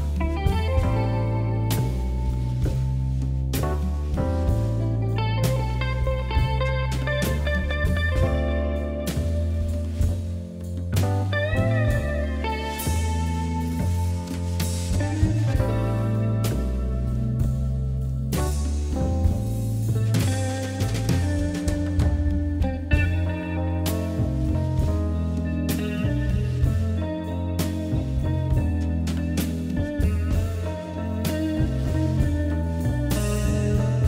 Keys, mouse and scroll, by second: 0.2 click, 1.2 s, 3.3 ctrl+z, 3.5 ctrl+z, 4.5 Tab, 5.3 KP_Divide, 6.0 KP_1, 6.5 click, 6.7-7.5 middle drag, 7.5 click, 7.8-8.3 scroll up 2, 8.3 KP_3, 9.0 shift+z, 9.7 shift+z, 10.1 KP_1, 10.7 click, 10.9 scroll down 1, 11.2-12.0 middle drag, 12.0-12.6 scroll down 1, 12.6-13.7 drag, 13.9 scroll down 1, 14.1-15.6 shift+middle drag, 15.6-16.2 scroll up 2, 16.2-16.6 scroll up 1, 16.6-18.1 middle drag, 18.5 click, 18.8 Tab, 19.1 click, 19.6-21.1 middle drag, 21.1 shift+d, 22.2 p, 22.9 Tab, 23.1 click, 23.4 click, 23.7 click, 24.3 KP_Divide, 24.9 KP_7, 26.0-26.6 right drag, 26.6 s, 29.2 KP_1, 29.6-30.1 scroll up 2, 30.1 scroll down 1, 30.3 Tab, 30.8 a, 31.3 e.